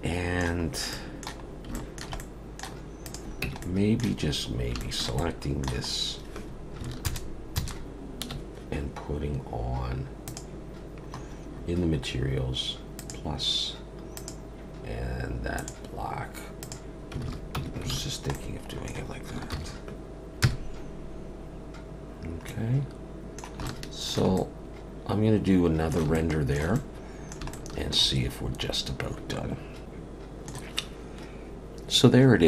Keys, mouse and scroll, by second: 0.7-1.1 scroll up 2, 0.9 middle click, 1.5-2.2 scroll up 3, 1.8 shift+middle click, 2.2 middle click, 3.0 click, 3.5 Tab, 3.7 middle click, 4.3 scroll up 3, 4.8 shift+middle click, 5.2 middle click, 6.0 scroll up 1, 7.1 ctrl+KP_Add, 7.6 ctrl+KP_Add, 10.3 click, 11.1-12.9 scroll up 11, 12.9 scroll up 2, 13.0 click, 14.2 click, 16.6 click, 17.3 alt+a, 17.6 Tab, 18.1 alt+a, 18.1 scroll down 2, 18.4 middle click, 19.6 ctrl+s, 20.4 KP_0, 22.5 middle click, 23.7 shift+middle click, 24.4 middle click, 26.2 shift+middle click, 26.8 middle click, 27.5 shift+middle click.